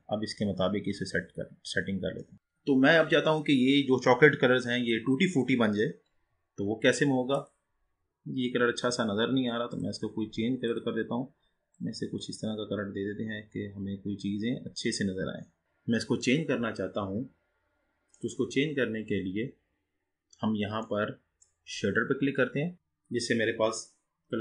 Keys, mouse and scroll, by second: 0.5-1.2 scroll down 3, 1.2-2.3 scroll up 4, 2.3-3.3 scroll up 1, 3.3-5.3 scroll up 1, 6.7-7.3 scroll down 4, 7.3 click, 9.9 click, 10.8 drag, 15.6 click, 18.4 click, 19.8-20.2 scroll down 3, 20.2-21.0 scroll up 3, 21.0-24.4 middle drag.